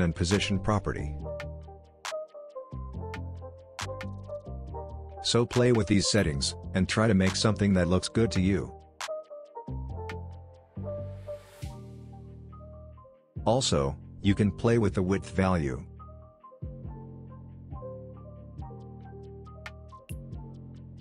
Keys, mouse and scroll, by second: 5.3 p, 5.6 p, 6.4 p, 7.2-11.3 drag, 14.0-21.0 drag.